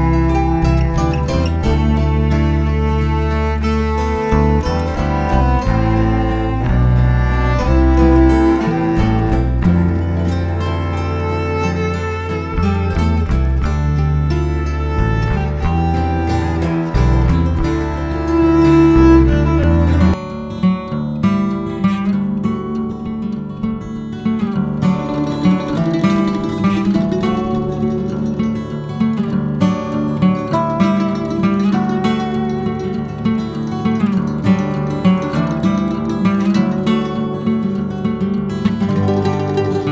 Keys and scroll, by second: 1.1 space, 2.4 Escape, 5.2 x, 5.3 space, 6.2 space, 6.2 b, 10.5 Escape, 11.2 space, 16.5 Escape, 17.4-18.7 typing, 23.8 e, 23.9 space, 24.5 Escape, 26.5 Escape, 26.5 b, 26.6 space, 29.4 BackSpace, 33.0 space, 34.4 Escape, 35.9 Escape, 36.6 Escape, 36.7 Escape, 37.0-38.2 typing.